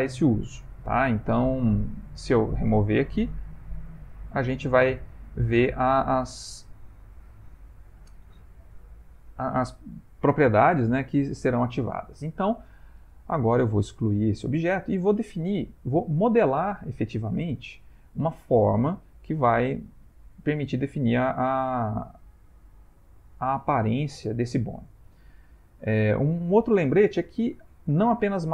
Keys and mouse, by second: 3.6 click, 12.8 click, 14.0 x, 27.5 shift+a.